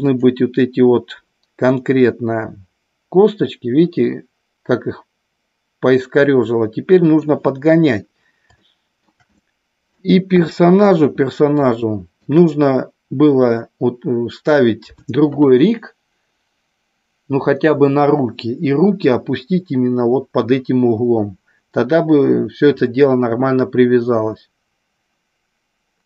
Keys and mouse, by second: 0.1 click, 1.6-7.2 middle drag, 8.6-9.0 shift+middle drag, 9.3-9.9 middle drag, 10.2 KP_1, 11.9 shift+middle click.